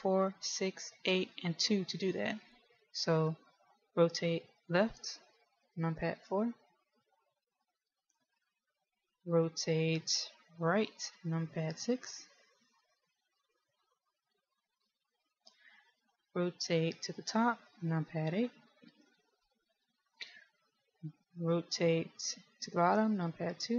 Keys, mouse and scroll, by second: 6.2 KP_4, 6.9 KP_4, 7.2 KP_4, 8.2 KP_1, 12.2 KP_6, 12.6 KP_6, 13.2 KP_6, 13.4 KP_6, 15.2 KP_1, 19.2 KP_8, 19.6 KP_8, 20.4 KP_1, 23.5 KP_2.